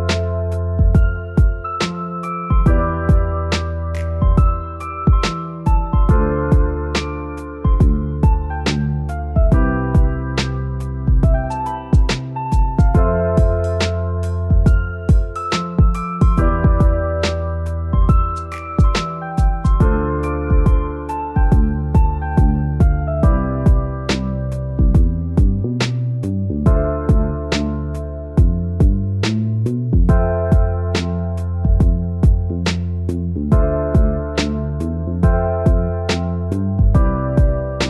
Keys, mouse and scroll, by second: 2.5 middle click, 2.7 scroll up 1, 13.4 scroll up 1, 14.8-15.2 scroll up 1, 18.9-19.5 scroll up 1, 22.3-22.7 scroll up 1, 24.6 scroll up 1, 24.8 middle click, 26.6 scroll up 1, 27.0 middle click, 33.8 click, 35.6 scroll up 1, 36.8 scroll up 1.